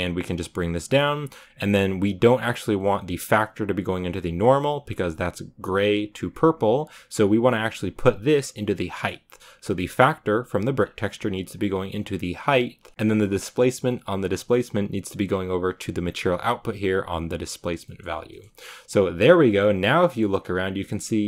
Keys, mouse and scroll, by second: 0.0-1.5 drag, 1.5-8.9 middle drag, 8.9-10.2 drag, 10.2 middle click, 10.4 click, 10.9-12.5 scroll up 3, 16.0-19.5 drag, 19.5-21.0 middle drag, 21.0 scroll down 3.